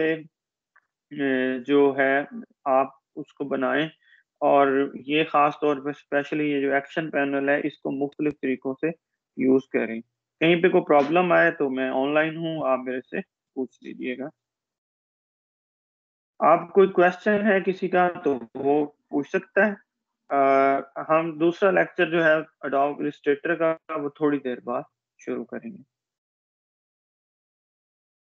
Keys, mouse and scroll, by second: 7.3 click, 14.2 click, 27.0 click.